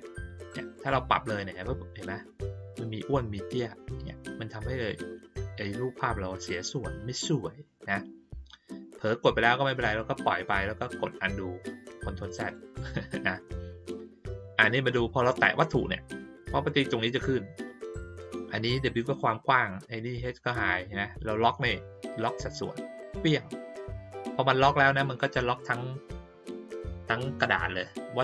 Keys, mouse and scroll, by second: 0.7-10.2 drag, 12.3 click, 15.3 click, 16.0 click, 22.9 click.